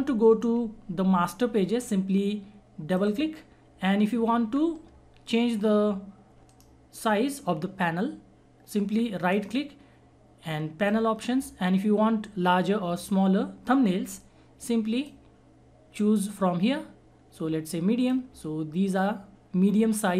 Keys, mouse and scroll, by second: 2.8 click, 6.5 right click, 9.4 right click, 10.8 click, 14.9 click, 15.0 click.